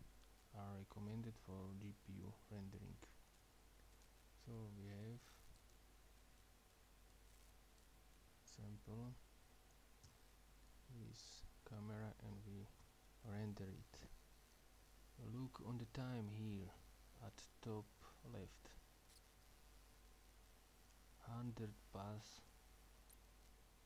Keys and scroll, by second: 10.1 ◽, 12.9 F12.